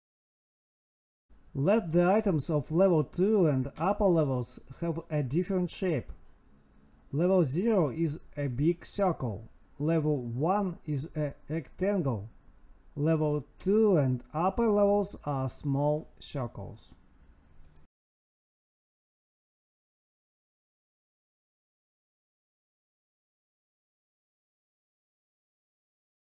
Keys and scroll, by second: 7.8 space, 7.9 space, 10.2 space, 10.7 Left, 11.0 space, 14.8 Escape, 14.9 Right, 15.0 space, 18.0 Escape, 18.1 Right, 18.3 space, 19.9 Right, 20.1 space, 21.3 Tab, 23.9 Tab, 25.1 End, 25.8 Down.